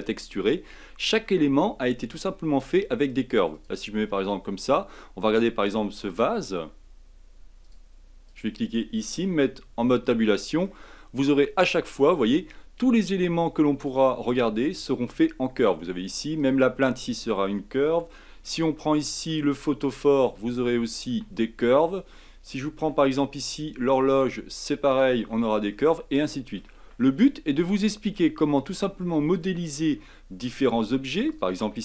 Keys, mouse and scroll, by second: 3.7 click, 4.4-5.3 scroll up 4, 5.3 click, 6.0 click, 7.7-8.3 drag, 9.3 Tab, 9.8-12.5 middle drag, 12.5 Tab, 13.8 click, 14.2-14.8 scroll up 6, 14.8 Tab, 15.1-15.9 scroll down 5, 15.9 Tab, 16.3 click, 16.8 Tab, 17.2 scroll down 3, 18.1 shift+middle click, 18.6-19.0 scroll up 4, 19.1 Tab, 19.8 click, 20.2 Tab, 21.1 Tab, 21.2-21.7 scroll down 4, 21.7-23.0 middle drag, 23.0-23.4 scroll up 5, 24.9 click, 25.2 Tab, 25.7 middle click, 26.6 scroll up 1, 26.8-27.8 scroll down 8, 27.8-28.3 middle drag, 28.3 shift+scroll up 1, 28.4-30.7 shift+middle drag, 30.7-31.3 scroll up 4, 31.3 click, 31.7 Tab.